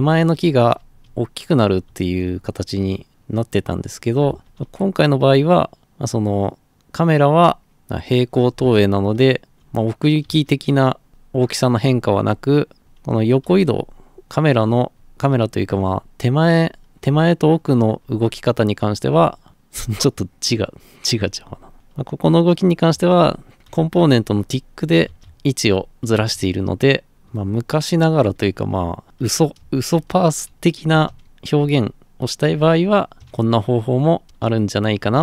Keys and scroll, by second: 0.0-5.8 typing, 7.4 d, 8.5-11.9 typing, 13.2-20.3 typing, 21.7 a, 21.7 space, 22.9 a, 23.0 space, 23.7 a, 23.9 space, 25.0-26.2 typing, 27.8-35.1 typing.